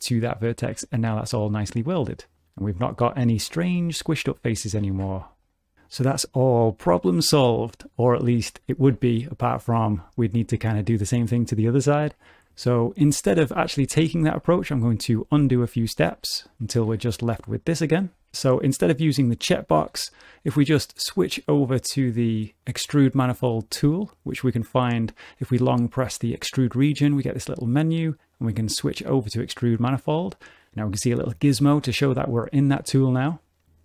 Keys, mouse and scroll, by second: 0.7 g, 3.4 3, 3.6 click, 4.0 g, 4.7 click, 4.8 g, 6.6 middle click, 7.1 g, 7.9 middle click, 8.5 scroll down 2, 8.7 shift+middle click, 9.0 middle click, 9.6 click, 9.8 g, 11.4 middle click, 12.4 shift+middle click, 13.0 ctrl+z, 13.3 ctrl+z, 13.6 ctrl+z, 13.8 ctrl+z, 14.1 ctrl+z, 14.3 ctrl+z, 14.6 ctrl+z, 14.8 ctrl+z, 15.1 ctrl+z, 15.3 ctrl+z, 15.7 ctrl+z, 16.5 ctrl+z, 16.9 g, 19.9 t, 22.6 click, 25.4 click, 32.2 shift+middle click.